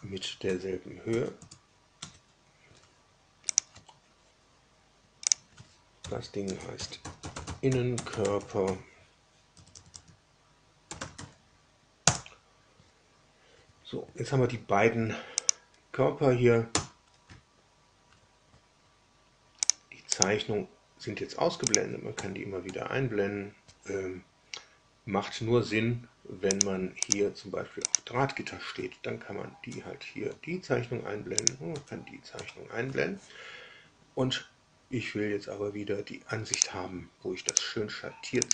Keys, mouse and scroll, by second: 0.4 Tab, 1.1 Tab, 1.3 Return, 1.9 Tab, 3.4 click, 5.2 drag, 5.9 F2, 6.5-11.6 typing, 12.0 Return, 15.3 click, 16.6 space, 19.6 click, 20.1 click, 21.6 click, 22.1 space, 22.6 space, 26.5 click, 27.0 click, 27.8 click, 29.6 space, 30.2 space, 31.3 click, 31.6 space, 32.3 space, 36.5 click, 37.4 click, 38.4 click.